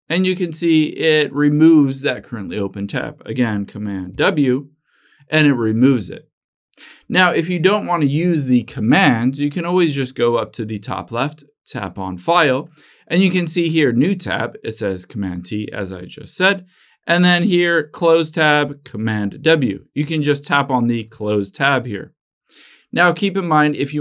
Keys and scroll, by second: 4.3 super+w.